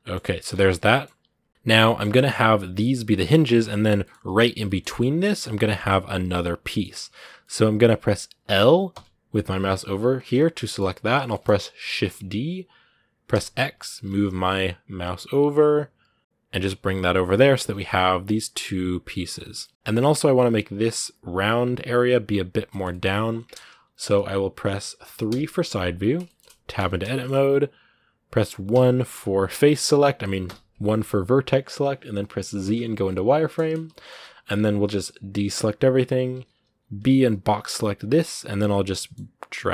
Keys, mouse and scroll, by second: 0.3 Tab, 0.7 middle click, 1.3 scroll down 1, 1.6-2.8 middle drag, 2.8 scroll down 1, 2.9-6.6 middle drag, 6.6 scroll up 2, 7.2 middle click, 8.0 right click, 8.7 l, 10.4 middle click, 10.7 scroll down 1, 11.0 shift+middle click, 11.8 shift+d, 17.0 middle click, 17.5 Tab, 17.5 scroll down 2, 17.6-19.7 middle drag, 19.7-22.2 scroll up 1, 22.5-23.8 shift+middle drag, 23.8 KP_1, 26.0 shift+middle click, 26.5 Tab, 26.9 shift+middle click, 27.0-27.4 shift+scroll up 2, 28.5 1, 33.7 shift+middle click, 34.3-34.7 scroll down 1, 34.7-35.1 scroll up 1, 35.1 a, 35.6-36.6 scroll up 1, 37.7 b.